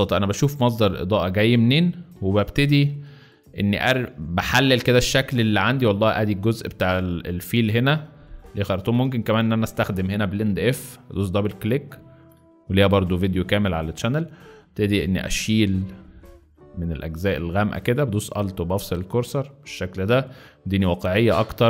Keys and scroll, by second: 2.6-4.4 typing, 9.0 space.